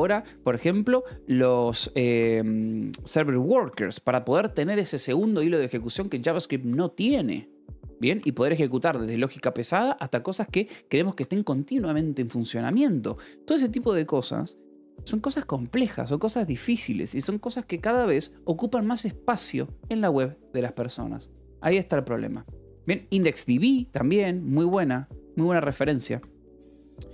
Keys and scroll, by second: 14.8 Escape.